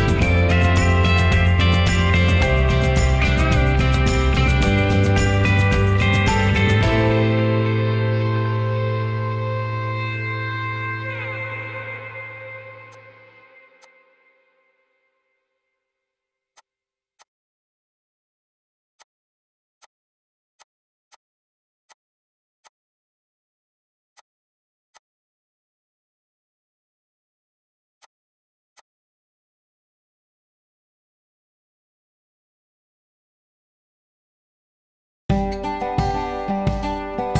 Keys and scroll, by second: 22.4 m, 28.5 m, 31.9 Escape.